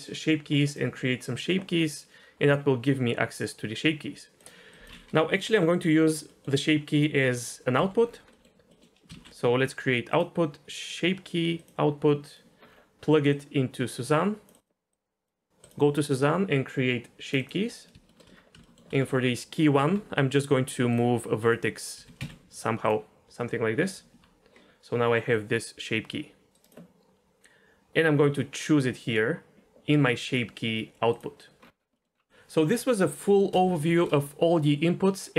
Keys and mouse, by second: 0.5 click, 0.7 click, 1.8-4.3 drag, 4.4 click, 4.7 drag, 6.4 middle drag, 7.8 Delete, 8.4 middle click, 8.8 middle click, 9.1 shift+a, 13.3 click, 13.5-14.6 drag, 14.9-15.2 drag, 15.6 click, 16.0 middle click, 17.2 click, 17.4 click, 18.1 shift+middle drag, 18.6 shift+middle drag, 19.8 Tab, 21.4 click, 21.9 g, 22.2 z, 23.9 Tab, 25.3-26.5 drag, 28.3-31.2 drag, 31.9 middle click, 33.9 shift+a.